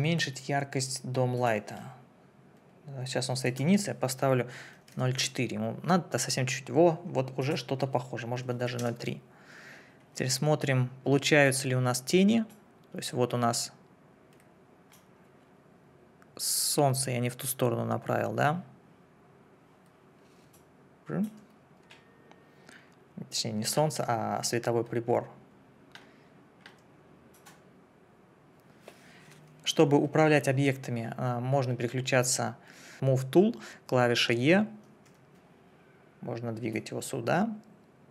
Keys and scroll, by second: 4.9 4, 5.1 Return, 8.4 KP_Decimal, 8.5 3, 8.8 Return, 35.1 e.